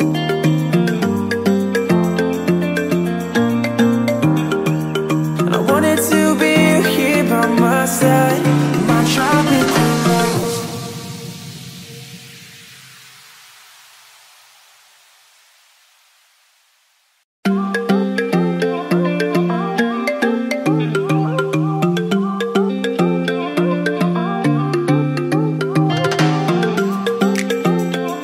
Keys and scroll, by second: 2.1 ctrl+a, 4.3 ctrl+t, 7.2 Return, 9.9 space, 10.3 ctrl+v, 26.7 g.